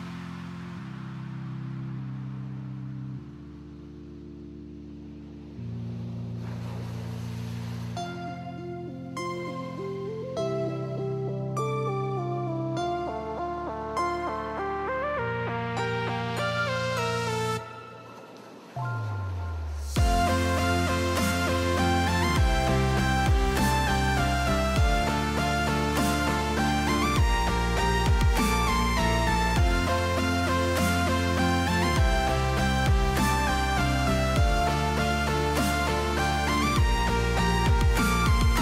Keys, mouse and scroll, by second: 2.4 click, 7.6-8.7 drag, 10.2 middle click, 10.8 middle click, 11.5 click, 16.0 click, 16.2 click, 16.4 click, 16.5 click, 16.8 click, 17.0 click, 17.4 click, 17.7 click, 17.8 click, 18.0 click, 18.4 click, 18.7 click, 19.3 click, 20.6 middle click, 21.3 click, 21.6 click, 21.8 click, 22.0 click, 24.7 click, 31.4 click, 35.6 KP_0, 37.2 KP_0, 37.9 middle click, 38.4 ctrl+s.